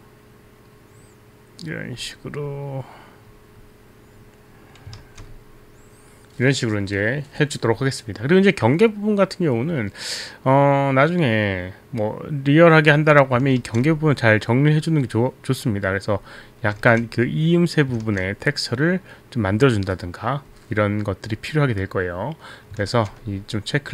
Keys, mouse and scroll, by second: 5.0 ctrl+z, 13.6 ctrl+z, 17.3 ctrl+z, 18.4 ctrl+z, 23.0 ctrl+z.